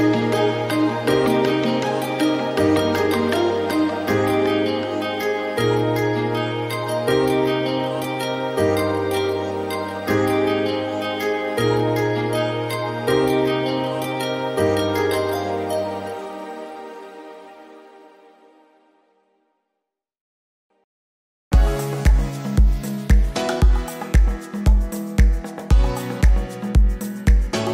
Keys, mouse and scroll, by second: 0.1 scroll down 5, 0.3-1.4 scroll up 3, 1.6 click, 3.6-5.0 drag, 5.0-8.5 right drag, 8.5 click, 8.9-9.5 scroll up 1, 9.5 click, 10.5 click, 11.4 click, 11.8-13.5 middle drag, 13.5-14.6 drag, 15.5 n, 16.9 g, 19.7-21.7 right drag, 21.7-22.9 drag, 23.5 click, 24.0 scroll down 2, 24.3-24.9 shift+middle drag, 24.9 click, 25.8-27.7 right drag.